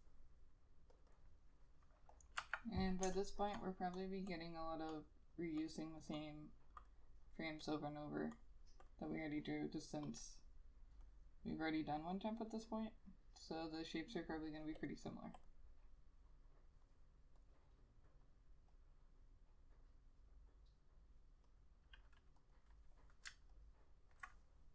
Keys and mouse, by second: 2.5 F6, 3.2 space, 4.4 double click, 22.7 double click, 23.7 alt+click.